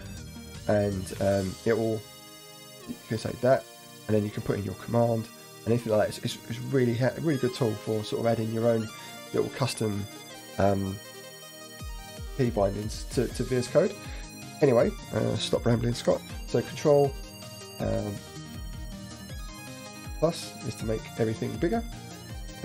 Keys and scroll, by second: 0.0 ctrl+alt+shift+h, 0.2 ctrl+alt+shift+j, 7.8 ctrl+z, 8.8 Down, 9.1 Right, 16.8 ctrl+=, 17.9 ctrl+=, 19.0 ctrl+=.